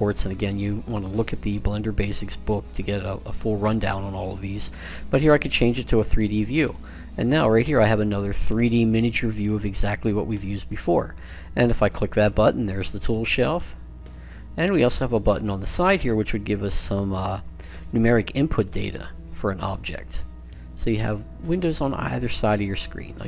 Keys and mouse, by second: 6.4-11.6 middle drag, 11.6-15.3 drag, 17.8-19.6 drag, 19.6-22.0 middle drag, 21.3-23.2 drag.